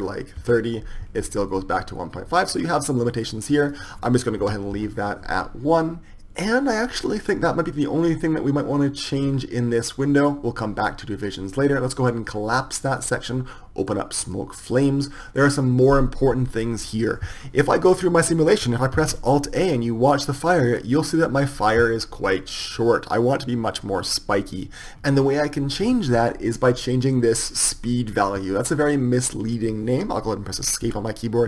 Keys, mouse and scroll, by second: 12.6-17.0 drag, 17.5-21.8 drag, 31.1 Escape.